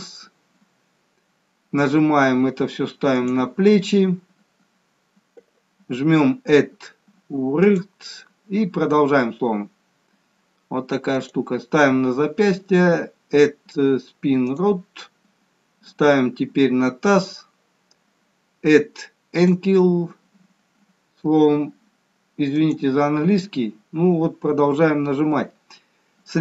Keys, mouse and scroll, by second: 0.1 click, 7.8 click, 14.6 click, 19.5 click, 25.5 scroll down 2.